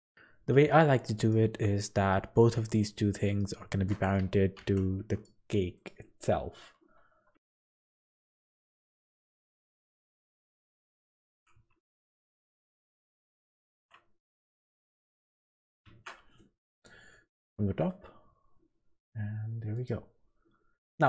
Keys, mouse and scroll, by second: 0.0 shift+click, 1.2 click, 2.7 shift+click, 3.2 click, 4.5 ctrl+p, 5.7 click, 7.3 ctrl+z, 8.6 ctrl+z, 8.9 middle click, 9.4 click, 10.1 click, 10.5 g, 12.1 g, 15.9 shift+Tab, 16.6 KP_7, 17.2 scroll up 4, 17.7 g, 20.2-20.9 scroll down 5.